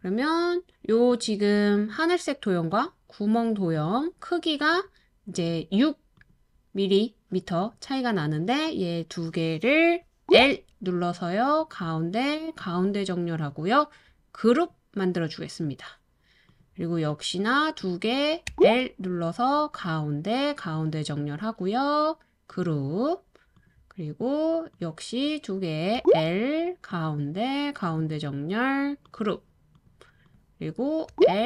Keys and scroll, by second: 10.2 l, 10.4 l, 18.5 typing, 26.0 typing, 31.1 typing.